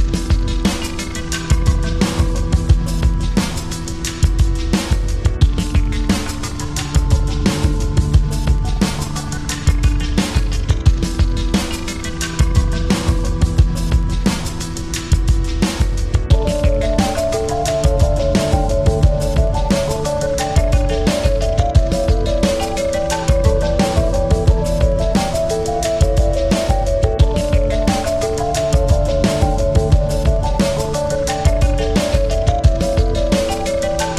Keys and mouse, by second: 1.1-2.6 drag, 1.1 typing, 2.8 click, 2.8 typing, 4.1 click, 4.1 typing, 5.5-8.4 drag, 5.5 typing, 10.2 click, 10.2 typing, 13.8 ctrl+-, 14.4-16.0 typing, 15.9 click, 17.0 ctrl+=, 17.5 space, 18.2 click, 18.4 space, 20.6 click, 20.6 typing, 21.9 click, 21.9 typing, 22.0-24.2 shift+drag, 25.3 click, 28.5 click, 29.2-32.8 typing, 29.5 click, 30.7 ctrl+-, 32.1 click.